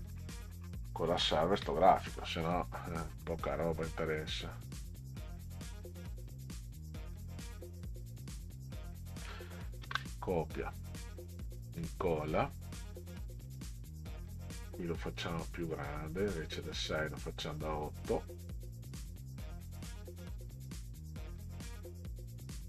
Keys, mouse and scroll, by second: 2.6 click, 4.6 click, 7.6 click, 10.7 click, 11.5 ctrl+v, 15.1 click, 16.5 click, 17.7 click, 19.7 click, 20.4 click.